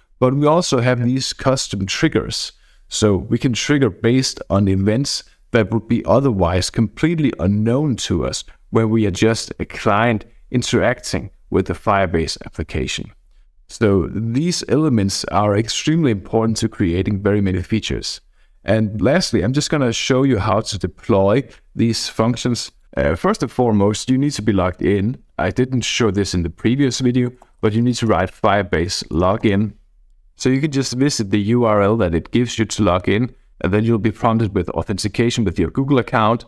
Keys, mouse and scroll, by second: 2.3-3.7 scroll up 2, 16.8-17.8 scroll down 2, 20.1 click, 20.8-22.6 drag, 22.6 click, 27.2-29.7 typing, 34.4-35.6 drag, 35.9-36.4 drag.